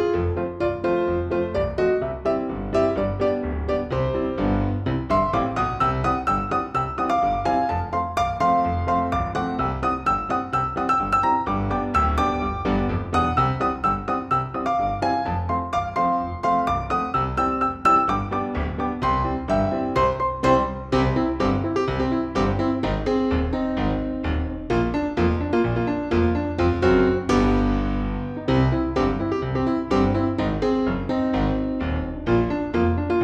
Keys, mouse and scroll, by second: 2.9 shift+click, 6.2 ctrl+g, 7.2-12.4 drag, 12.6-17.0 shift+drag, 17.9 ctrl+g, 18.5-22.3 drag, 22.3 click, 23.4 ctrl+g, 24.0 click, 25.5 ctrl+d, 25.8-29.0 drag, 29.4 shift+click, 32.0 ctrl+g, 32.7 ctrl+d, 32.9-33.2 drag.